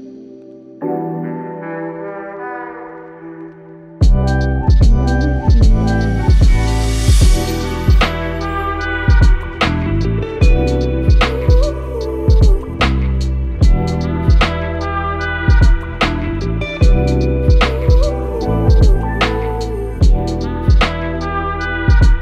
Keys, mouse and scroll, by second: 2.3 click, 4.3 Return, 16.8-17.5 typing.